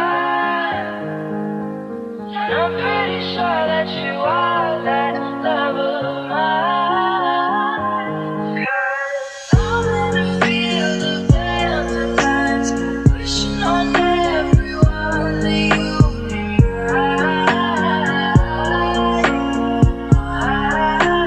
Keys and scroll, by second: 1.4 f, 5.4 ctrl+z.